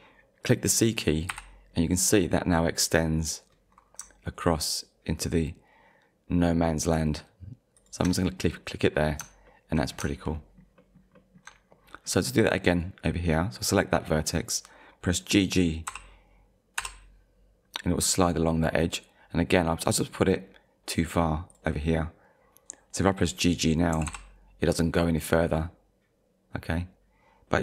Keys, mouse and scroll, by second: 1.3 c, 7.8 shift+click, 8.4 scroll down 1, 8.9 scroll down 2, 9.5 shift+middle click, 9.9-10.3 scroll down 2, 10.8 shift+middle click, 11.2 shift+middle click, 11.7 scroll up 1, 12.7 click, 15.9 g, 16.8 g, 21.5 click, 23.9 g.